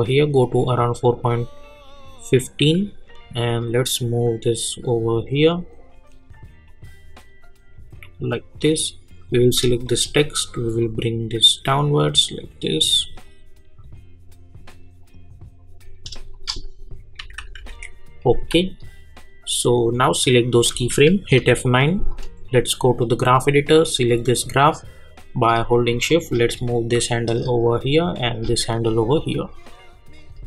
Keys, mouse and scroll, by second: 1.0-15.8 drag, 18.4-29.1 drag, 29.1 click.